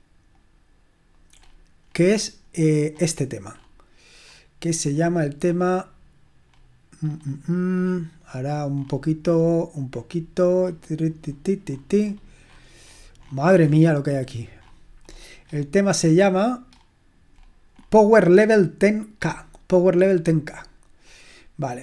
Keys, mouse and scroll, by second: 0.3 click, 4.2-6.4 scroll up 2, 6.4-10.2 scroll up 1, 10.2-14.1 scroll up 1, 14.1-16.7 scroll up 1, 16.7-17.3 scroll up 1, 17.3-17.8 scroll down 1, 17.8-19.1 scroll up 1, 19.1-21.8 scroll up 1.